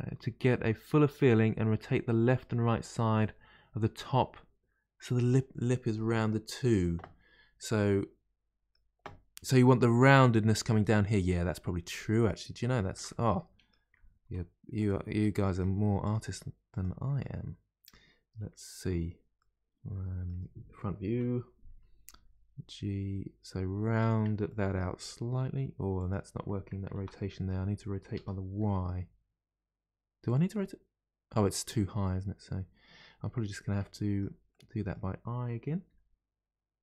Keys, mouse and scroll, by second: 7.8-10.8 middle drag, 11.0-12.2 middle drag, 12.2-12.6 scroll up 2, 12.6-14.2 shift+middle drag, 14.2 3, 14.7 click, 15.1 middle click, 16.0 click, 16.6 click, 17.2-21.0 middle drag, 21.0 KP_1, 22.1 g, 24.4 middle click, 24.9 r, 26.9 ctrl+z, 27.1-28.1 middle drag, 28.1 r, 30.5-33.6 middle drag, 34.5-35.8 middle drag, 35.8 g.